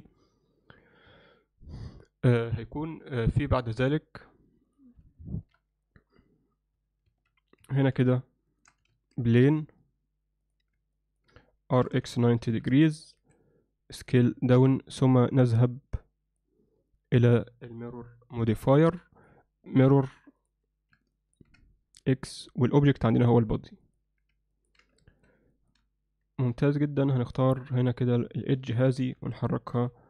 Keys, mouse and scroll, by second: 4.7 click, 5.2 shift+middle drag, 7.1 shift+a, 8.9 shift+a, 11.0 middle click, 11.8 r, 13.2 s, 15.7 click, 17.2 drag, 19.3-20.5 drag, 21.2 ctrl+alt+middle click, 22.9-24.0 drag, 24.6 ctrl+alt+middle click, 25.0 alt+shift+middle click, 25.6 ctrl+middle click, 26.5 Tab, 27.3 click, 27.8 click, 28.1 click, 28.9 g.